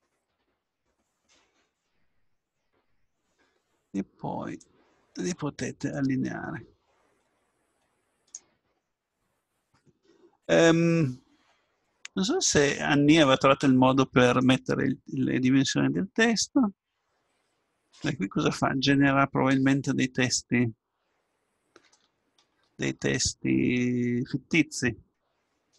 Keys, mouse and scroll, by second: 10.3-12.4 middle drag, 12.5 middle click, 12.7 middle click, 19.8-25.7 middle drag.